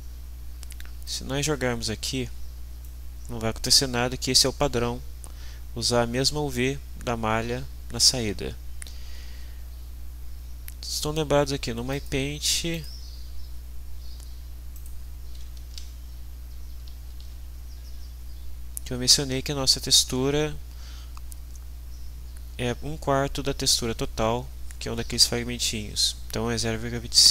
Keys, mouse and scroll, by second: 2.8-3.8 drag, 11.9 click, 12.7 click, 14.7 click, 16.1 alt+Tab, 16.8 alt+Tab.